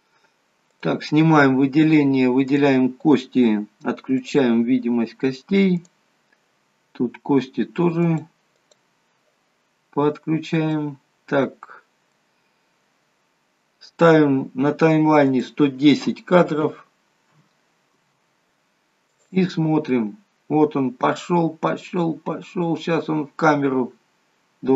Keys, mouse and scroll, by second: 0.8 click, 2.4 click, 4.3 click, 5.8 click, 8.1 click, 8.6 click, 10.2 scroll up 2, 10.8 middle click, 15.3 click, 19.1 click, 23.8-24.2 scroll up 3.